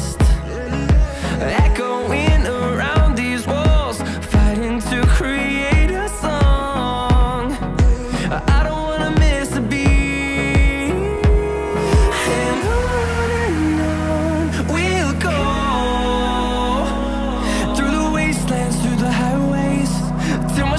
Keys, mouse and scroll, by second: 3.0 scroll up 2, 13.7 Escape, 14.5 Escape, 14.6 Escape, 15.6 Delete, 19.6 Escape.